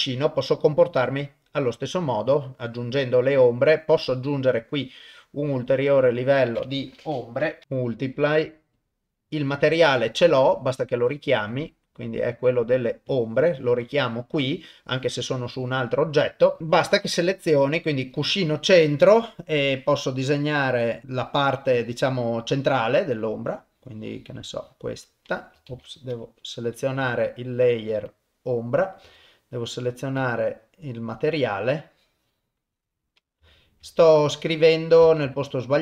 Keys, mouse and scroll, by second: 1.2 click, 1.8-2.9 drag, 1.8 middle click, 3.3 click, 3.3 middle click, 4.5 click, 5.5 click, 6.2-8.9 drag, 10.8 click, 11.5-13.2 drag, 16.6 click, 16.6 middle click, 18.2 click, 23.0-24.8 drag, 25.7 ctrl+z, 27.0 y, 29.0 u, 31.8-33.0 drag, 33.5 shift+middle click, 33.9-35.0 middle drag, 35.3 ctrl+z.